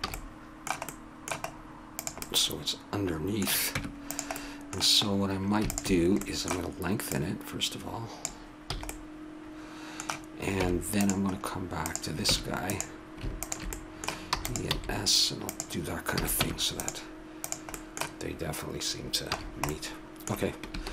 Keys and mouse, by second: 0.2 a, 0.3-1.9 middle drag, 1.9 right click, 3.7 Tab, 5.7 right click, 7.2-8.2 drag, 8.7 a, 10.6 Tab, 12.7 Tab, 14.3 e, 14.7 s, 16.1 a, 16.4 Tab, 17.4-19.2 drag, 19.3 a.